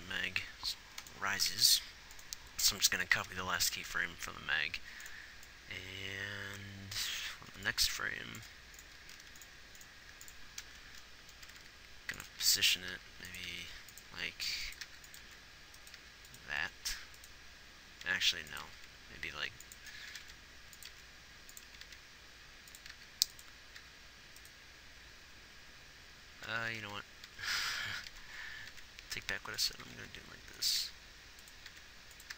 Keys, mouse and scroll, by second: 0.8 a, 1.9 shift+d, 3.6 shift+d, 10.5 ctrl+s, 11.8 r, 13.3-17.0 typing, 18.3 r, 19.0 r, 20.5 r, 21.4 r, 22.1 r, 23.3 g, 24.2 g, 26.9 r, 30.2 r, 31.2 g, 32.1 r.